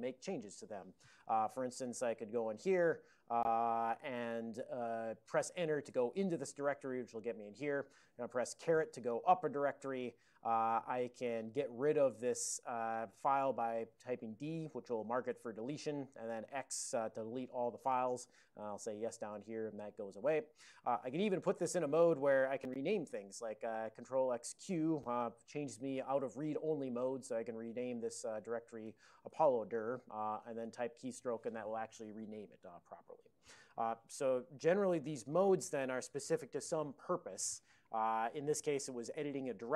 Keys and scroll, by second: 2.3-4.6 typing, 11.5 typing, 15.3 typing, 18.5-19.2 typing, 19.4 Return, 23.9 ctrl+x, 24.5 ctrl+q, 27.0 ctrl+n, 28.1 ctrl+e, 28.6-29.9 typing, 30.4 ctrl+c, 30.6 ctrl+c.